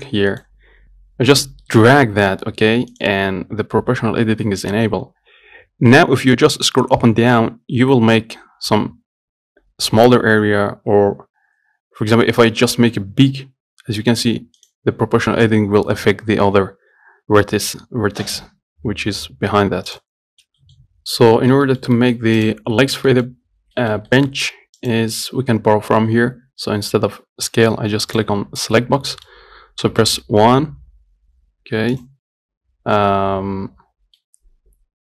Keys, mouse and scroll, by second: 0.1-2.0 drag, 2.0 g, 5.0 g, 16.8 g, 20.3 middle click, 20.3 scroll up 1, 20.6 shift+middle click, 21.3 scroll down 1, 21.6 shift+middle click, 22.5-23.0 scroll up 2, 22.7 click, 23.3 shift+middle click, 23.9 scroll down 1, 24.0-25.1 shift+middle drag, 25.1 click, 25.8-27.1 scroll down 1, 28.4 click, 29.2 middle click, 30.1 KP_1, 34.4-35.0 middle drag.